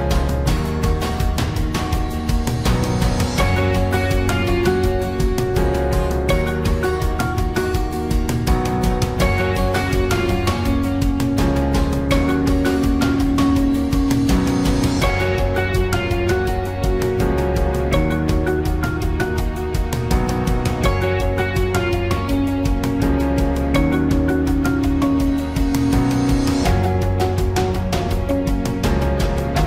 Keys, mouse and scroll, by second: 19.4 ctrl+click, 20.3 click, 21.2 ctrl+c, 27.2 ctrl+v.